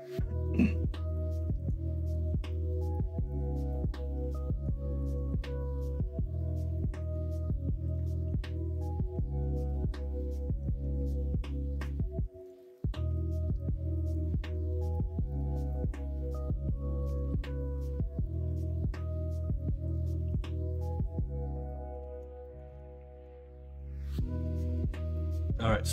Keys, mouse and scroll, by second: 6.3 middle click, 9.5-11.4 middle drag, 12.8 middle drag, 13.0 Tab, 13.4-15.5 middle drag, 17.0 Tab, 17.7-18.6 middle drag, 19.1-20.0 middle drag, 20.7 middle drag, 21.7-22.1 middle drag, 22.4 shift+middle drag, 22.8-23.2 middle drag, 25.8 middle drag.